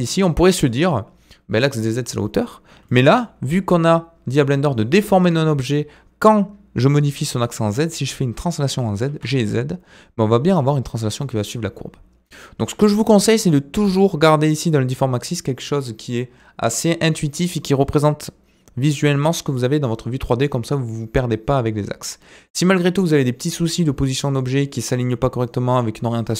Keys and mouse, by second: 0.1 middle click, 2.8-3.1 middle drag, 9.1 g, 13.4-14.0 drag, 22.6 click.